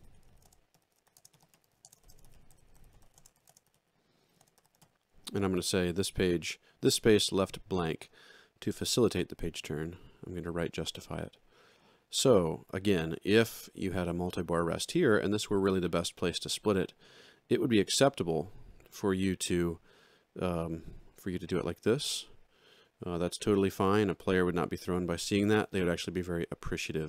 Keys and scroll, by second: 0.0-4.6 typing, 5.9 ctrl+a, 18.4 ctrl+2.